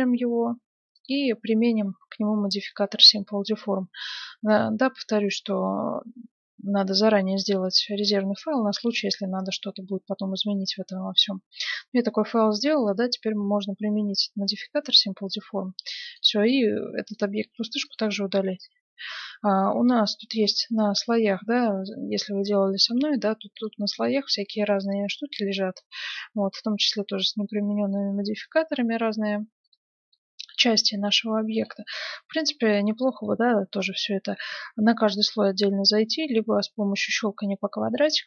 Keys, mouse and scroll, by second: 0.9-2.6 drag, 14.8-16.6 drag, 16.0-18.9 right drag, 17.5 x, 20.0-22.1 drag, 21.3-24.3 middle drag, 23.5-26.4 drag, 25.7-28.6 middle drag, 28.8 middle click, 29.6-31.3 drag, 30.1-31.6 middle drag, 31.5-33.2 drag, 33.2-34.9 right drag, 36.5-38.2 drag.